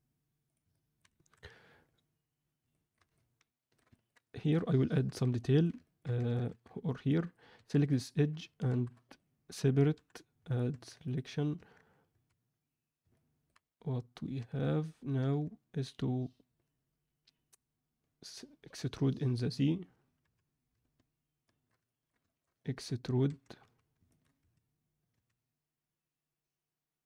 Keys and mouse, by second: 0.6-1.0 alt+middle drag, 1.1 alt+a, 2.6 alt+middle click, 3.1-3.7 alt+shift+middle drag, 3.8 ctrl+alt+middle drag, 4.2 alt+shift+middle click, 4.8 click, 5.0 Tab, 5.3 middle click, 5.8 ctrl+middle click, 6.1 Tab, 6.8 alt+Tab, 7.0 alt+middle click, 7.5 2, 7.8 click, 8.6 shift+d, 9.9 p, 10.6 Tab, 11.0 click, 11.5 Tab, 12.0 a, 13.1 middle click, 14.4 Tab, 15.2 Tab, 20.2 KP_3, 21.4 shift+middle click, 21.8 ctrl+middle click, 22.2 shift+middle click, 22.5 ctrl+alt+middle click, 23.2 1, 23.6 z, 24.0 ctrl+alt+middle click, 24.4 a, 25.1 e.